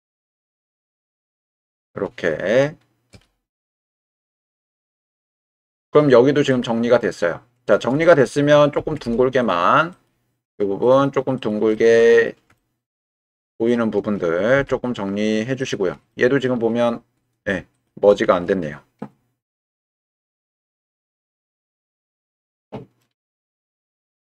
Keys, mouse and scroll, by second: 0.9 click, 3.1 m, 5.0 middle click, 5.3 right click, 6.5-7.7 middle drag, 8.8 g, 8.9 z, 11.7 middle click, 12.6 shift+middle click, 13.1-14.1 middle drag, 14.6 g, 15.6 click, 16.2 middle click, 17.7 shift+click, 21.1 m, 22.4 middle click, 23.9 g.